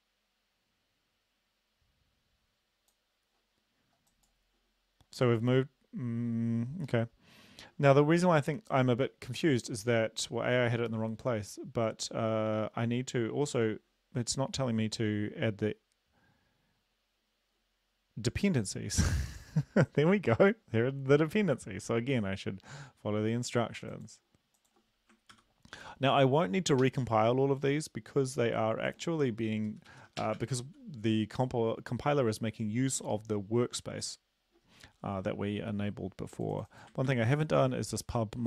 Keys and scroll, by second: 25.3 ctrl+v, 26.9 ctrl+s, 29.7 shift+Up, 29.9 shift+Right, 30.2 BackSpace, 30.4 BackSpace, 30.6 ctrl+s, 37.1 ctrl+c.